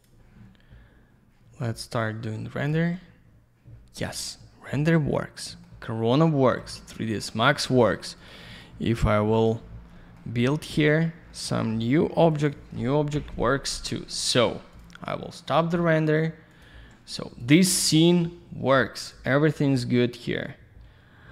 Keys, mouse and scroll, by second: 0.0 click, 0.0 click, 2.0 click, 4.2 alt+middle click, 5.8 alt+middle click, 8.2 click, 8.3 click, 8.5 click, 8.6 double click, 9.4 click, 9.5 click, 9.7 scroll down 1, 10.4 click, 12.2 q, 12.3 click, 12.4 click, 13.1 Delete, 14.7 click, 14.8 click, 16.5 click, 16.6 click, 17.4 click, 17.5 click, 17.7 click, 17.8 click, 17.9 z, 19.1 click, 19.2 click.